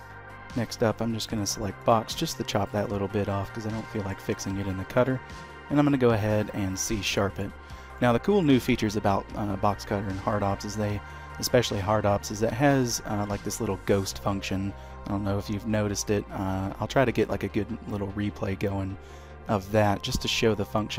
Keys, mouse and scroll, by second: 0.4 d, 1.6 click, 3.2 middle click, 3.8 shift+middle click, 4.4 q, 6.5 scroll up 1, 7.0 shift+middle click, 7.4-7.9 scroll down 2, 7.8 middle click, 12.2 middle click, 12.9 shift+middle click, 20.6 middle click.